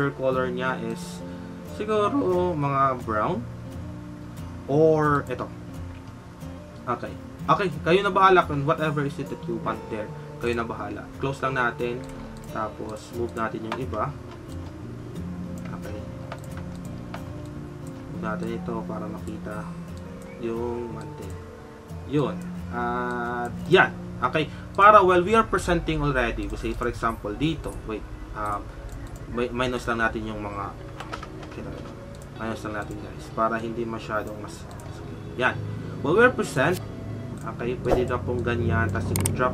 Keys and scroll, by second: 12.0 typing.